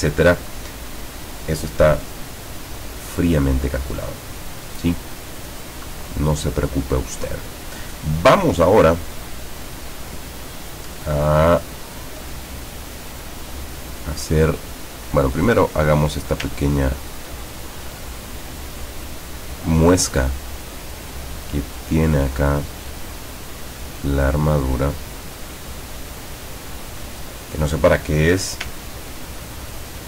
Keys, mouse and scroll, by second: 5.7 click, 9.0-9.9 middle drag, 16.8-17.3 ctrl+scroll up 2, 18.3 click, 20.8 click, 23.2 click, 26.1 click, 26.9 click, 29.0-29.6 ctrl+scroll down 4.